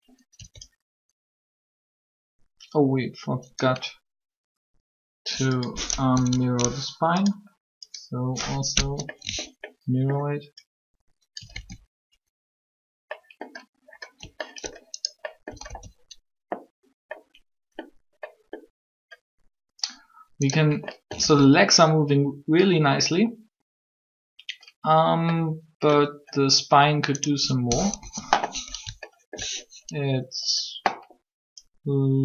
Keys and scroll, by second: 5.9 Up, 11.5 alt+a, 15.6 alt+a, 21.2 alt+a, 27.7 3.